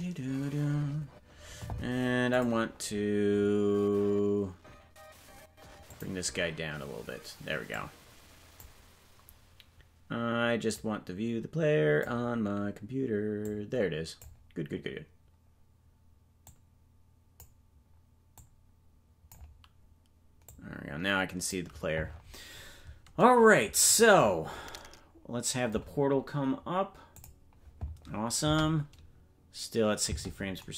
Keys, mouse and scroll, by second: 23.8-24.8 scroll down 13, 27.2 click, 28.4 space, 30.6 space.